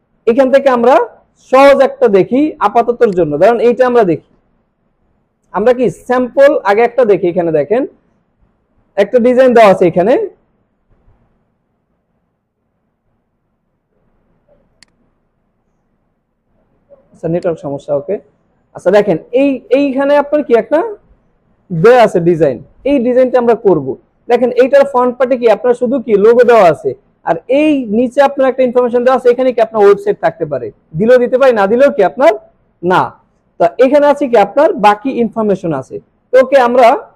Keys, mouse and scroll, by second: 1.0 scroll down 1, 3.1 click, 3.4 click, 4.5 scroll up 1, 5.4 scroll up 1, 5.8 scroll down 1, 7.6 scroll down 1, 9.9 scroll up 1, 10.9 scroll up 1, 13.6 ctrl+Num_Lock, 13.6 scroll up 1, 13.7 ctrl+scroll down 1, 14.7 click, 15.7-16.7 scroll up 1, 16.9 scroll down 1, 17.5 click, 18.6 scroll down 1, 19.1 scroll up 1, 20.1 scroll down 1.